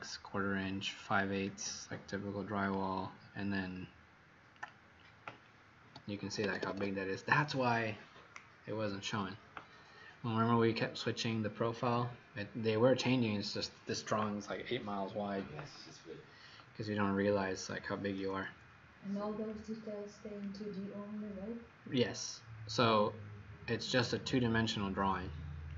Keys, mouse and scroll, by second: 6.2 Escape, 6.4 Escape, 6.7 Escape, 17.2 Escape, 17.4 Escape, 19.5 click, 21.6-21.9 scroll up 5, 22.5-23.5 scroll up 6, 23.5-24.2 scroll down 1, 24.2-25.1 scroll up 16, 25.6 click.